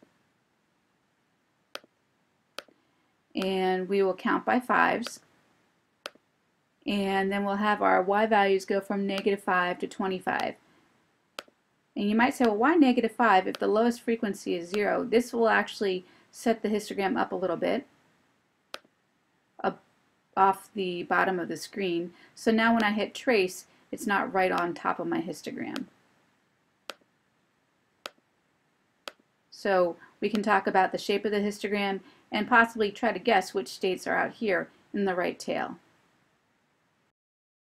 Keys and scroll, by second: 0.1 Return, 2.2-3.1 typing, 3.4 Return, 5.2 5, 6.1 Return, 10.5 5, 11.5 Return, 12.5 2, 13.6 5, 14.8 Return, 18.9 F5, 22.8 F4, 24.7 Right, 25.8 Right, 27.0 Right, 28.2 Right, 29.1 Right, 30.5 Right.